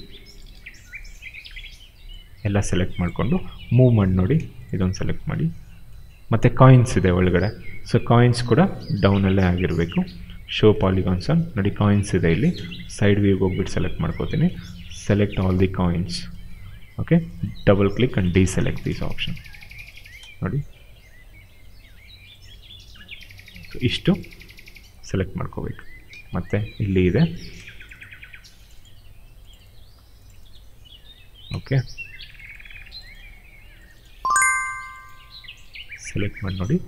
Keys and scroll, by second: 3.5 w, 6.1 ctrl+z, 6.5 space, 7.9 f, 8.2 space, 12.2 space, 18.5 space, 26.0 ctrl+z.